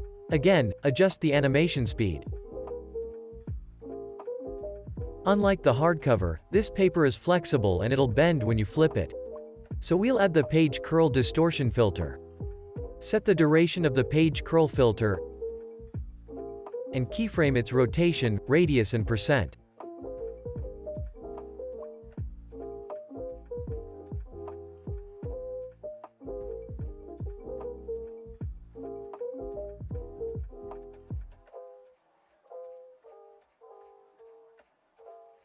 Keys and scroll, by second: 16.3 o, 23.2 o, 32.3 0, 32.3 Return, 33.4-34.2 typing.